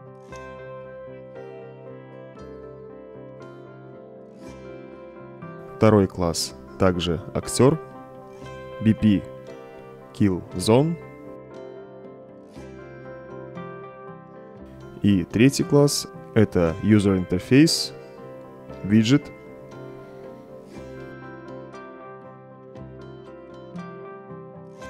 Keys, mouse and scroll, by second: 0.0-1.0 typing, 1.6 Return, 5.8 right click, 7.1 click, 8.1 click, 9.7-15.0 typing, 16.2 right click, 20.4 click.